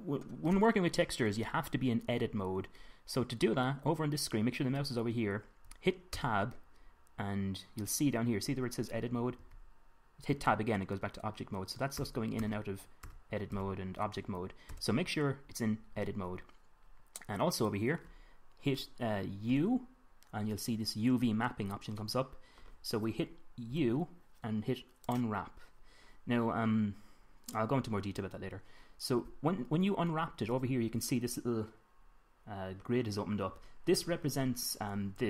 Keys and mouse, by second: 2.8-6.6 middle drag, 6.6 Tab, 10.8 Tab, 12.4 Tab, 12.9 Tab, 13.6 Tab, 14.0 Tab, 15.3 Tab, 20.0 u, 24.2 u.